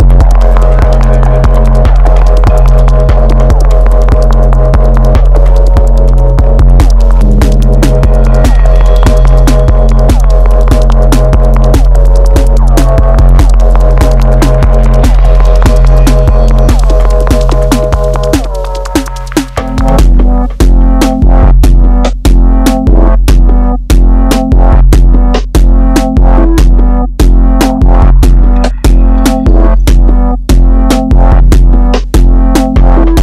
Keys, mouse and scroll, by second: 1.6-3.1 shift+middle drag, 3.1 ctrl+r, 8.3 click, 9.3 ctrl+shift+click, 11.6 click, 12.9 ctrl+shift+click, 13.5 middle click, 14.0 KP_1, 17.2 click, 28.6 click, 30.0 click, 31.6 click, 32.6 click.